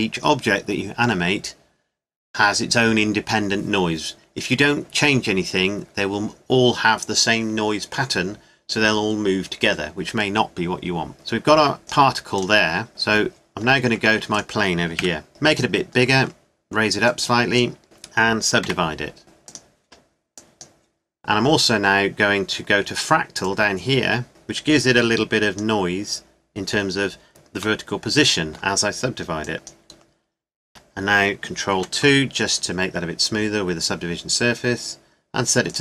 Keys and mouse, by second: 11.9-12.9 drag, 12.9 right click, 13.8 click, 15.0 KP_Decimal, 15.3 s, 17.8 Tab, 18.6 w, 24.5-26.2 middle drag, 29.4 click, 30.6 Tab, 31.8 ctrl+2, 35.7-35.8 drag.